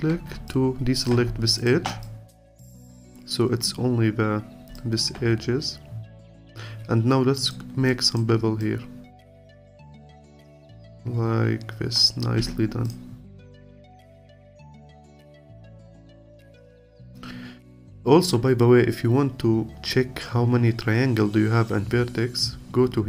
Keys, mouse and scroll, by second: 0.5-1.7 alt+drag, 2.0-8.8 alt+drag, 10.7-12.4 alt+drag, 12.4 Tab, 12.8 click, 13.2-13.8 scroll down 2, 13.8-14.8 alt+drag, 14.8 scroll down 1, 15.0-18.0 alt+drag, 18.6-20.6 scroll up 3, 20.6-21.3 scroll down 2.